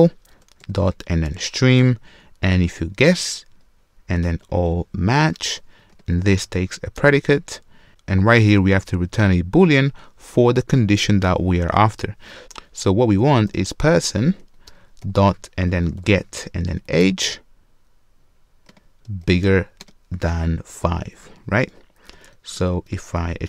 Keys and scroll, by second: 0.5 Return, 5.9 ctrl+space, 14.7 Return, 22.6 super+w.